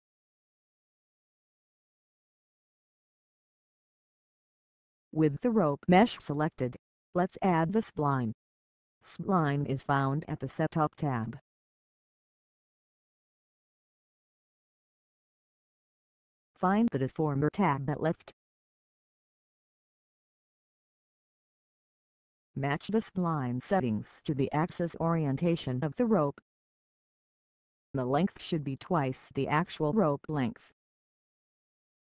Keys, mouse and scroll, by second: 0.0 click, 6.7 click, 11.0 f, 12.2-13.7 scroll up 1, 14.0-15.5 scroll down 1.